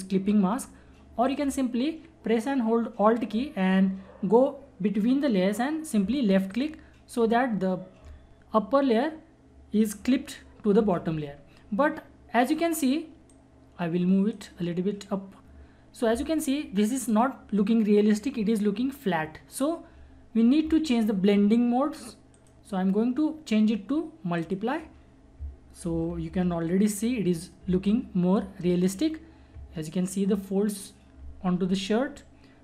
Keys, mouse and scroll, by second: 1.2 click, 4.0 click, 6.5 alt+click, 10.9 ctrl+Num_Lock, 10.9 alt+click, 11.0 ctrl+=, 13.3-16.9 drag, 22.3 click, 22.3 click, 26.1 ctrl+=, 27.6 space, 27.9 click, 28.1 space.